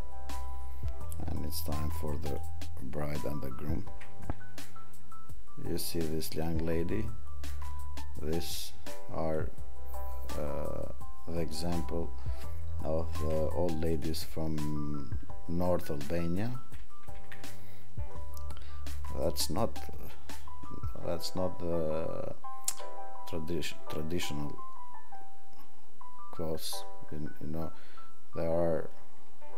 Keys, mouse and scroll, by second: 13.9 click.